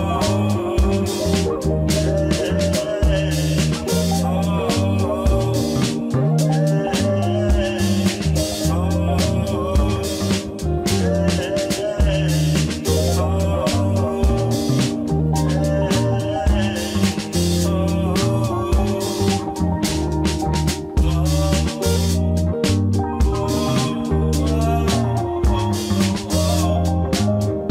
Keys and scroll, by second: 1.8 shift+a, 2.7 Tab, 2.9 m, 5.1 e, 6.1 e, 7.8 Tab, 19.8 g, 20.5 g, 22.1 g, 24.0 g.